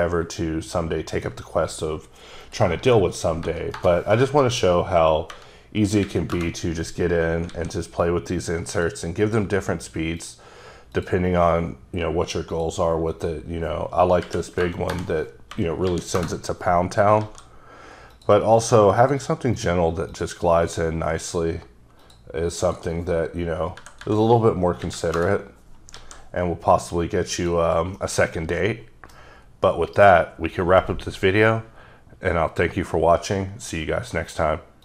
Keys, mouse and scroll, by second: 1.1 click, 2.5 click, 3.5 BackSpace, 3.8 BackSpace, 5.3 KP_0, 6.1 KP_3, 6.4 KP_Enter, 7.5 alt+a, 8.8 click, 9.3 click, 10.2 click, 11.0 click, 12.6 click, 13.3 click, 14.3 Right, 14.7 BackSpace, 14.9 BackSpace, 15.6 KP_0, 15.9 KP_7, 16.2 KP_Enter, 17.2 alt+a, 18.2 click, 18.6 click, 19.0 click, 19.6 click, 20.1 click, 20.7 click, 22.0 click, 22.7 click, 23.8 Delete, 24.1 Delete, 24.9 KP_3, 25.2 KP_Enter, 26.0 alt+a, 27.4 click, 28.0 middle click.